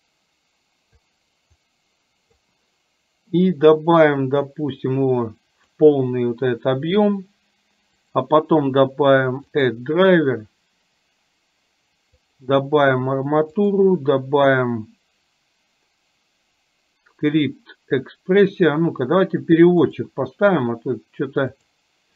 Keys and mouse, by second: 1.7 click, 4.6-5.9 drag, 8.2-18.7 right drag, 19.9-21.9 drag.